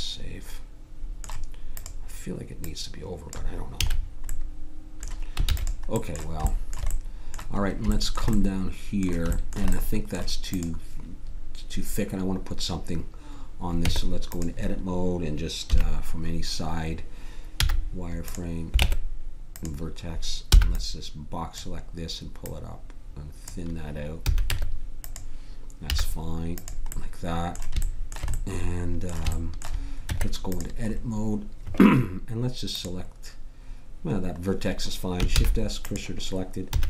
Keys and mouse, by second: 3.8 a, 4.4 middle click, 5.4 ctrl+s, 10.5-12.9 right drag, 13.8 Tab, 15.7 KP_3, 17.6 z, 18.8 ctrl+Tab, 20.5 b, 22.4-23.6 drag, 23.7 click, 24.2 a, 24.5 Tab, 25.8 z, 30.0 Tab, 34.9 middle click, 35.3 shift+s, 36.7 a.